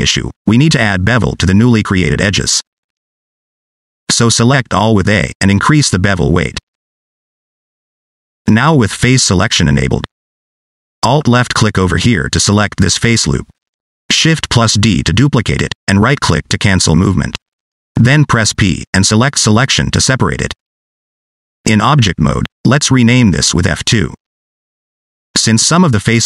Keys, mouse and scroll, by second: 2.7 middle click, 4.3 a, 6.1 click, 10.4 3, 10.9 middle click, 11.3-12.0 scroll up 3, 11.5 shift+middle click, 12.0 middle click, 12.9 alt+click, 13.4 middle click, 14.1 shift+middle click, 14.4 middle click, 15.0 shift+d, 16.7 middle click, 19.1 p, 22.3 Tab, 23.4 click, 24.0 F2.